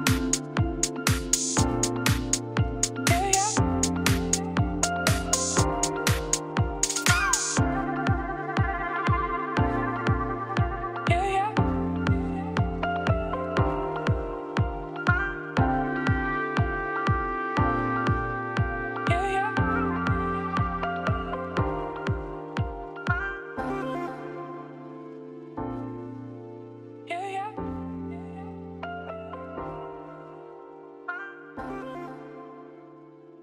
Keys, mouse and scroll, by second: 2.4 middle click, 2.5 scroll down 2, 2.8-3.9 middle drag, 3.9 click, 4.4-5.6 middle drag, 7.1-7.9 scroll up 1, 7.9 Tab, 8.3-11.5 typing, 8.4 click, 12.3 middle click, 12.8 click, 13.2 l, 13.4 middle click, 13.9 g, 14.9-16.1 middle drag, 16.4 3, 16.5 click, 16.9 KP_3, 17.8 r, 18.3 g, 20.4 middle click, 20.9-23.4 typing, 21.0 click, 24.4 KP_1, 24.7 KP_9, 25.2 KP_1, 26.8 r, 27.6 e, 29.0 g, 30.2 middle click, 30.8 KP_3, 31.0 KP_1, 31.5 g.